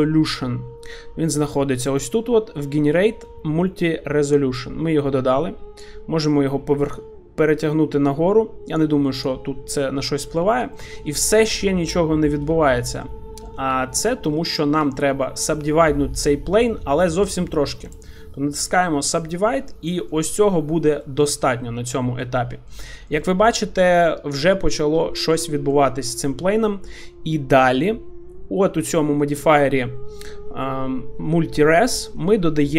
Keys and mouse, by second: 5.8-7.0 drag, 8.8 click, 10.2 middle click, 10.6 shift+middle click, 12.7 shift+middle click, 13.0 middle click, 13.7 Tab, 14.4 middle click, 15.3 middle click, 17.8 right click, 19.6 middle click, 21.0 middle click, 21.9 Tab, 22.2-22.7 middle drag, 22.9 shift+middle drag, 23.2-24.8 middle drag, 25.2 shift+middle click, 25.5-28.2 middle drag.